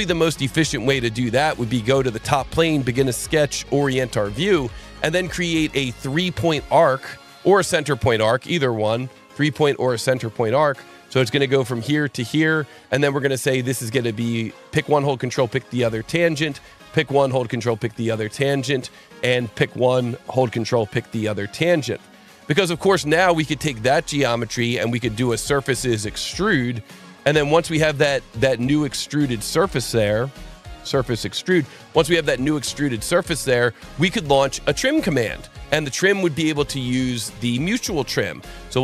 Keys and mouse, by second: 1.9 click, 2.7 click, 3.7 ctrl+8, 6.7 click, 8.8 click, 10.4 click, 11.6 click, 12.7 Escape, 13.8 click, 14.8 ctrl+click, 15.7 click, 17.0 ctrl+click, 18.7 click, 20.2 click, 21.9 click, 22.7 click, 25.1 click, 26.0 click, 27.4 click, 29.0 click, 30.6 click, 33.2 click, 37.3 click, 38.6 click.